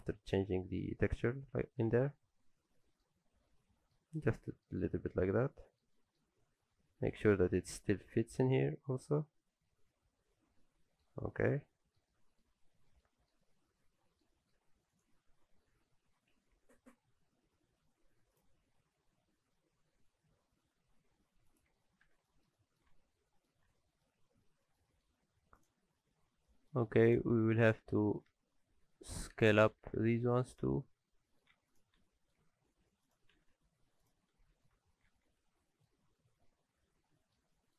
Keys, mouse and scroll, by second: 0.4 alt+a, 0.5 Tab, 0.7 middle click, 1.9 alt+a, 2.1-3.5 scroll down 3, 2.3 middle click, 3.5 middle click, 4.2-4.7 scroll down 2, 4.5 middle click, 4.8 shift+middle click, 5.3-5.8 scroll down 2, 5.4 middle click, 5.9 shift+middle click, 6.3-6.7 scroll up 1, 6.8 middle click, 6.8-7.3 scroll up 6, 7.4 shift+middle click, 8.6 middle click, 11.3-11.7 scroll down 6, 11.7 middle click, 12.1 shift+middle click, 12.7-13.4 scroll up 3, 13.0 middle click, 13.4-14.2 scroll down 4, 13.8 middle click, 14.3 middle click, 14.5-15.1 scroll up 5, 14.9 click, 15.2 Tab, 15.5 a, 16.4 r, 22.0 alt+a, 22.3 middle click, 22.6 shift+middle click, 22.9 Tab, 23.1 scroll up 1, 23.2 middle click, 23.6 alt+a, 23.8 middle click, 24.2-24.7 scroll down 6, 24.6 middle click, 24.9 shift+middle click, 25.1-26.4 scroll up 7, 25.6 click, 26.5 shift+middle click, 26.8-27.3 scroll up 2, 27.1 click, 27.4 shift+middle click, 27.8 scroll down 1, 28.0 middle click, 28.3 Tab, 28.5-29.3 scroll up 3, 28.7 a, 29.3 2, 29.4 click, 29.7 g, 31.3 shift+middle click, 31.5 Tab, 31.7 click, 32.1 shift+middle click, 32.4 Tab, 33.0 click, 33.3 g, 34.4 alt+a, 34.8 Tab, 34.9 scroll down 6, 35.1 alt+a, 35.3 middle click, 36.0-37.4 scroll down 2, 36.2 middle click, 37.5 shift+middle click.